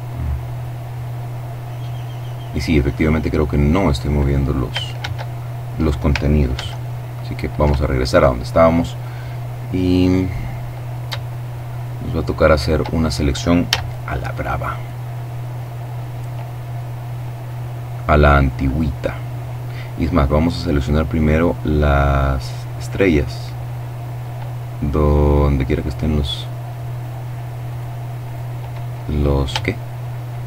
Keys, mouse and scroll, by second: 4.0 ctrl+shift+z, 5.5 z, 8.3 middle click, 8.8-9.4 scroll down 2, 9.4 middle click, 9.7-10.2 scroll up 3, 10.2 shift+middle click, 10.4-11.6 shift+scroll down 2, 12.6 a, 13.4-13.9 scroll down 2, 13.9 scroll up 2, 14.0-15.0 middle drag, 15.5-16.0 scroll up 2, 17.6 right click, 19.8 right click, 21.7 right click, 24.2 right click, 25.2 right click, 26.0 right click, 26.6 right click, 28.5-30.4 shift+middle drag.